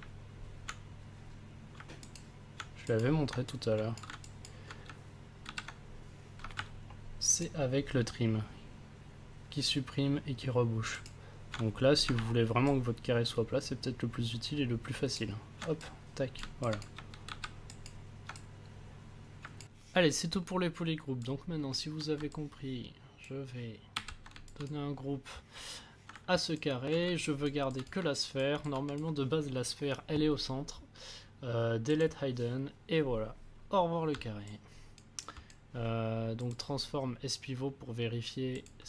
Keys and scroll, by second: 5.4 ctrl+w, 23.9 ctrl+w, 26.1 ctrl+s.